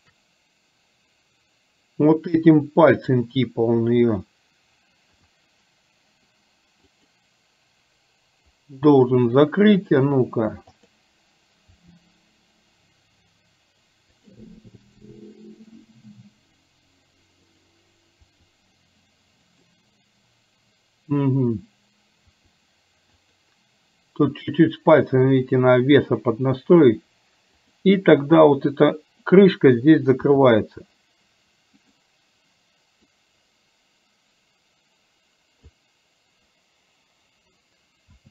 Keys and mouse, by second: 5.2 r, 9.9 click, 10.8 click, 11.8 r, 15.1 middle click, 17.6 click, 18.3 r, 22.3 r, 27.7 click, 30.4 r, 33.2-35.9 drag, 38.2 a.